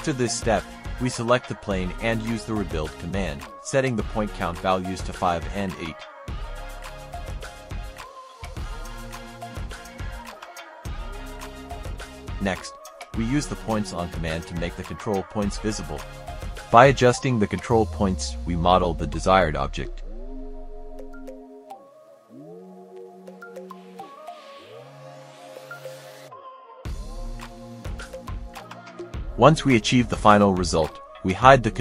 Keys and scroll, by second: 0.3-3.3 typing, 11.7 F10, 16.9 space, 18.2 m, 19.2 space, 21.0 Escape.